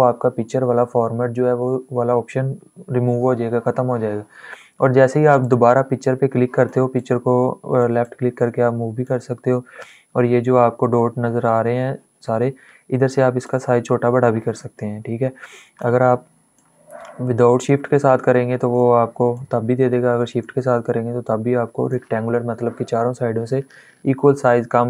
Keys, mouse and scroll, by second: 5.1 click, 5.2 click, 6.0 click, 6.9 click, 8.0 click, 13.4-15.6 drag, 16.2-19.0 drag, 19.0-24.5 drag.